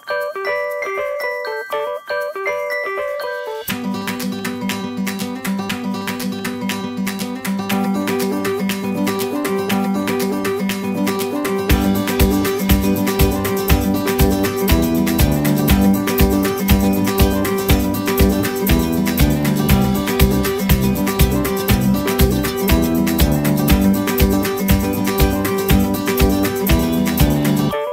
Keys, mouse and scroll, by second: 0.6 scroll down 1, 1.5-2.0 typing, 2.7-3.6 scroll down 1, 3.6-4.1 scroll up 1, 4.1 middle click, 16.0 Right, 18.1 middle click, 23.6 space, 24.2 middle click, 26.7 scroll down 1, 27.6 scroll down 1, 27.8 shift+middle click.